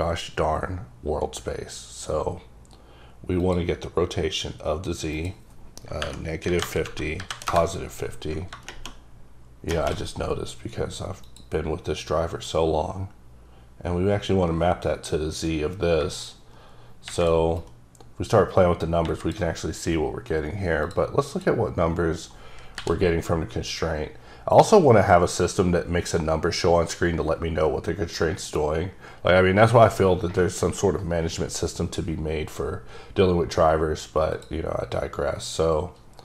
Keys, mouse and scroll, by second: 3.4 click, 3.5 click, 5.1 click, 6.0 KP_Subtract, 6.5 KP_5, 7.2 KP_5, 7.3 KP_0, 7.5 KP_Enter, 11.2 click, 11.9-14.1 scroll down 4, 16.0 shift+scroll down 4, 16.2 shift+click, 17.6-19.0 shift+drag, 20.8 click, 21.3 click, 22.7 n, 35.5 click.